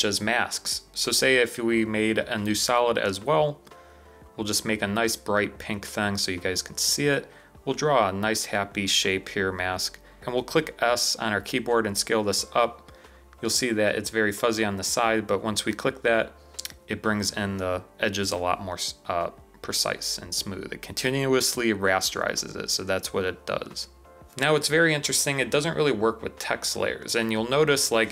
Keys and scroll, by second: 1.0 BackSpace, 10.2 s.